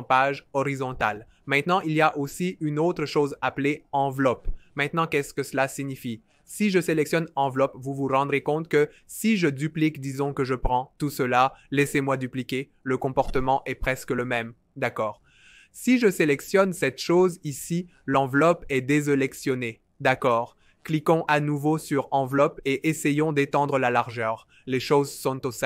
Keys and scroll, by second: 7.7 super+d, 10.6 super+d, 11.1 super+d, 11.6 super+d, 21.2 v.